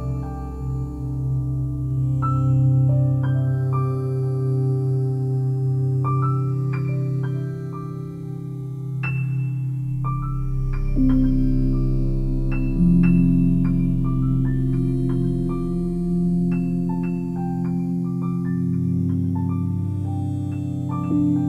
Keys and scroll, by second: 3.9 c, 9.4 Delete.